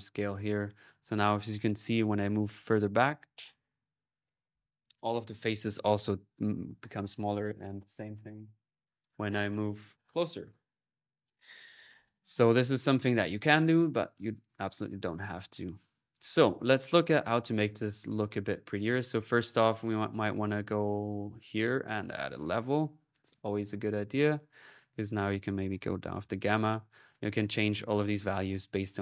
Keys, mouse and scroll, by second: 0.3 click, 13.2 click, 14.1 click, 14.7 click, 15.3-16.4 drag, 16.3-17.0 typing, 16.5-18.1 alt+drag, 18.1 alt+n, 18.1-19.3 drag, 18.4 middle click, 19.8 click, 20.3 click, 20.8 click, 21.4 right click, 21.8 click, 22.0-23.1 typing, 23.4-24.6 drag, 24.9 click, 27.1 middle click, 28.7 click.